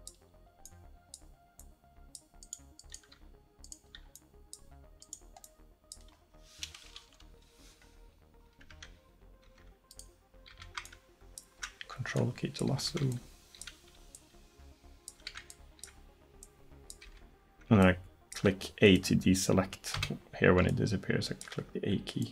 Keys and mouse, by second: 1.4-2.5 drag, 3.5 click, 6.2 middle click, 7.0-8.8 drag, 7.0 KP_1, 8.8 Tab, 9.5 Tab, 9.9 right click, 10.5 a, 12.6-22.3 drag, 12.8 a, 15.2 a, 17.1 a, 20.0 a.